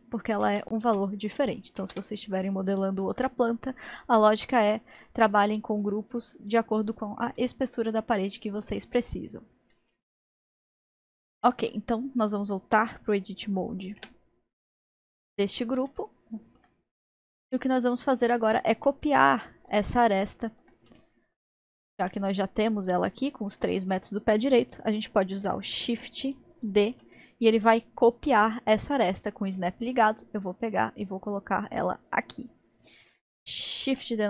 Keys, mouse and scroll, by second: 0.8 ctrl+z, 2.9-5.0 drag, 5.0-12.8 middle drag, 12.8 click, 14.0 Tab, 15.0-16.9 middle drag, 16.9-17.4 scroll up 1, 17.4-22.9 middle drag, 21.6-23.0 drag, 26.7 shift+d, 32.1-33.1 scroll up 3, 33.9 shift+d.